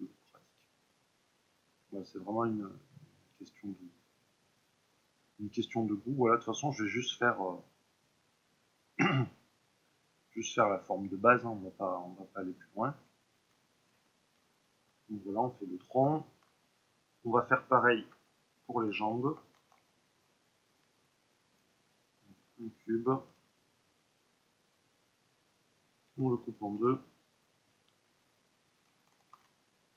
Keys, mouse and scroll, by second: 0.1 click, 0.4 middle click, 1.1 click, 1.7-4.5 middle drag, 4.5 click, 4.9-6.0 middle drag, 6.0 click, 6.7-8.6 middle drag, 8.6 click, 9.3 middle click, 10.1-11.3 drag, 11.3-18.0 middle drag, 18.0 Tab, 19.6 shift+a, 22.9 ctrl+middle click, 23.8 middle click, 23.8-28.1 drag, 26.7 ctrl+r, 27.7 ', 28.1 Tab, 29.3 ctrl+r.